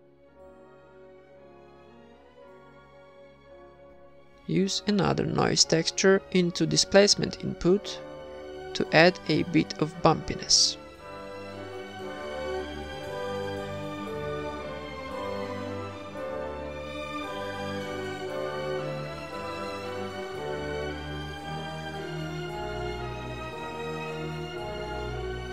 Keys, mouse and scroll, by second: 0.5-1.1 drag, 2.0 click, 4.4 click, 5.0-5.9 drag, 6.1 middle click, 6.6 ctrl+s, 6.9 shift+b, 8.5-10.8 typing, 9.6-10.4 drag, 9.8-10.6 right drag, 10.6 drag, 10.6-11.6 middle drag, 11.4-12.4 drag, 12.6 click, 15.6-17.3 drag, 18.7-19.9 middle drag, 19.4-21.2 drag, 20.8-21.9 middle drag, 21.7 click, 22.4 middle click, 22.8 ctrl+s, 24.4 shift+a.